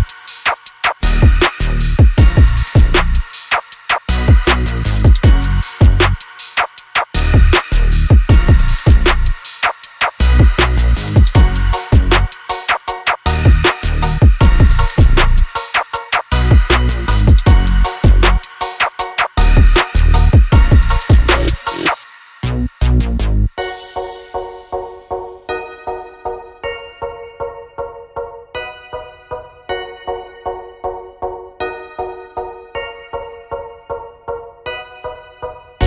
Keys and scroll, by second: 2.4 space, 6.1 space, 6.3 Escape, 9.5 l, 15.3-18.7 typing, 19.0 Return, 20.5 3, 20.8 0, 20.9 Return, 22.5-23.7 typing, 25.2-26.2 typing, 27.9 4, 28.3 0, 28.5 Return, 32.4-33.3 typing, 35.4 space.